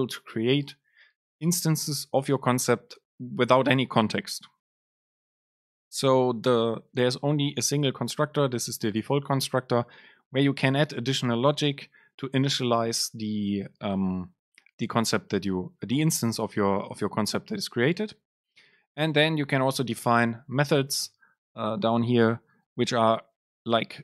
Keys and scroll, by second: 18.6 Down, 20.0 Return.